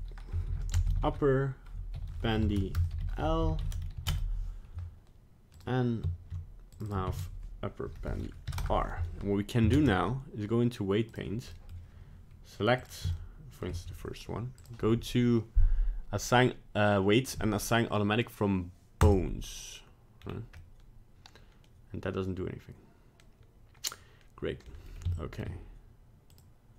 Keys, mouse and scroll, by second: 0.9 p, 5.5 click, 6.7 click, 6.9 click, 9.7 ctrl+Tab, 11.5 middle click, 12.8 click, 13.1 shift+middle click, 14.6 click, 20.2 scroll down 2, 20.6 middle click, 25.1 shift+middle click, 26.3 click.